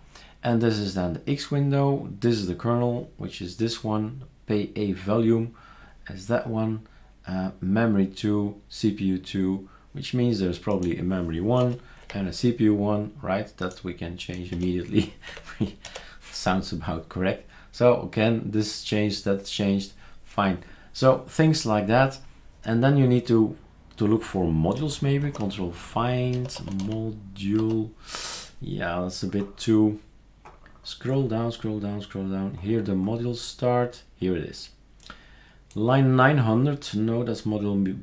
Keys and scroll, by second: 11.6-12.0 typing, 14.5-15.3 typing, 15.9 ctrl+s, 25.2 ctrl+f, 26.1-27.6 typing.